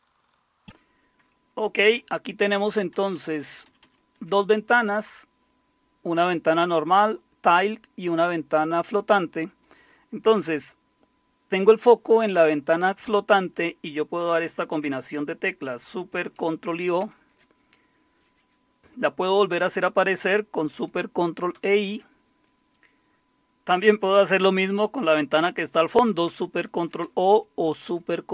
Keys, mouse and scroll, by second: 2.4 alt+super+Up, 2.6 alt+super+Up, 6.7 click, 17.0 ctrl+super+o, 21.5 ctrl+super+i, 26.3 ctrl+super+o, 27.8 ctrl+super+i.